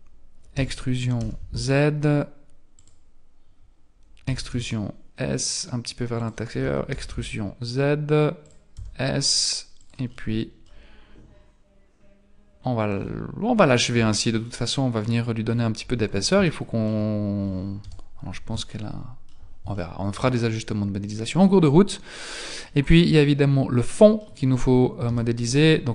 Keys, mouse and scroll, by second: 0.5 e, 4.3 e, 6.6 e, 8.7 s, 10.1 middle click, 12.9-13.4 scroll down 5, 13.5-13.9 scroll up 5, 13.9 Tab, 14.4-14.8 scroll down 2, 15.5 middle click, 16.1 scroll up 1, 16.5 shift+middle click, 17.8 KP_1, 18.7 shift+middle click, 19.8 shift+middle click, 20.5-21.0 scroll up 2, 22.7 middle click, 25.1 KP_1.